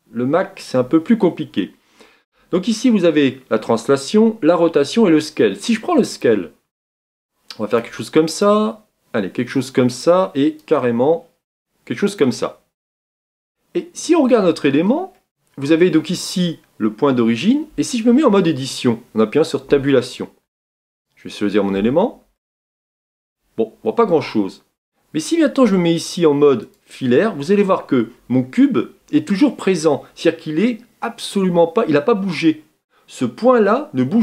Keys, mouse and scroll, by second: 13.5 scroll up 1, 13.5-14.2 middle drag, 14.2 scroll up 1, 14.3-15.1 scroll down 7, 15.1-19.7 middle drag, 19.7 Tab, 20.4 Tab, 21.0 click, 21.7 Tab, 22.4-26.6 middle drag, 26.6 click, 27.3-28.0 scroll up 3, 29.2-29.8 scroll down 2.